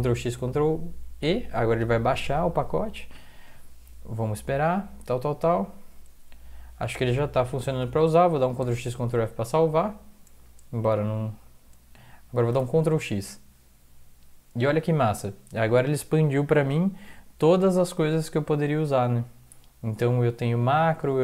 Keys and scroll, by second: 0.2 ctrl+e, 8.4 ctrl+x, 8.6 ctrl+s, 12.5 ctrl+x.